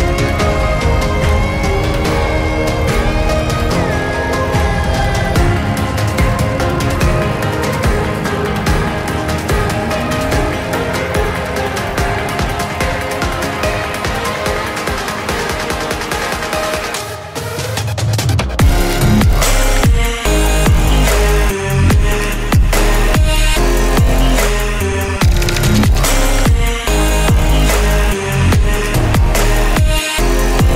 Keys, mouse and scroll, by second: 0.1 p, 0.9 space, 2.2 i, 2.4 f, 3.4-5.6 typing, 6.9 shift+/, 7.1 Return, 9.6 shift+3, 10.7-12.2 typing, 13.3 click, 13.9 Return, 14.5 ctrl+z, 15.0 click, 16.0 Return, 16.7 middle click, 17.0 click, 17.9-19.2 typing, 19.7 Return, 20.3-21.8 typing, 22.2 Return, 23.6-24.8 typing, 25.5 Return, 26.3 p, 26.6 shift+9, 27.3 Right, 28.2 Left, 28.7 Right, 29.4 Return, 30.6-30.7 typing.